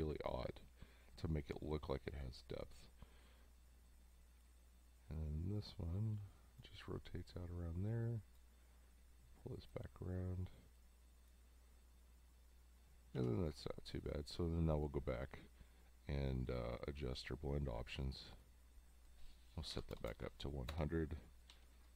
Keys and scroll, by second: 13.2 v, 19.7 1, 19.9 0, 20.7 Return, 21.5 v.